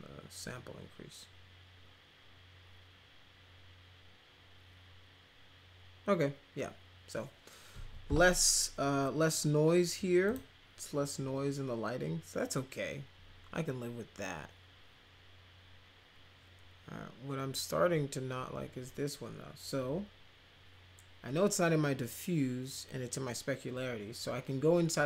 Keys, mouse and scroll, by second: 10.2 click.